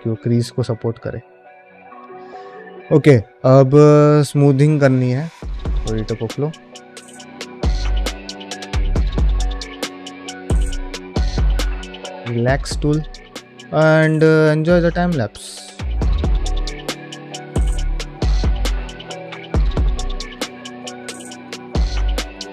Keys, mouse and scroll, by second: 1.2 ctrl+middle click, 1.5-3.0 middle drag, 3.5-4.6 middle drag, 5.7-6.0 drag, 7.8-22.5 drag.